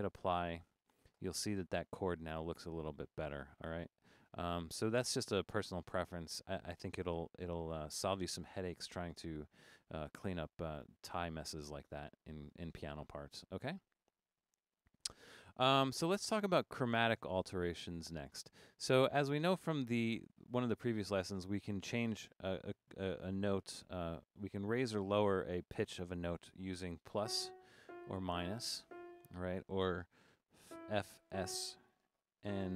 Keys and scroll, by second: 23.4 Up, 24.6 Down, 27.2-28.9 typing, 30.4-31.3 typing, 32.5-32.7 typing.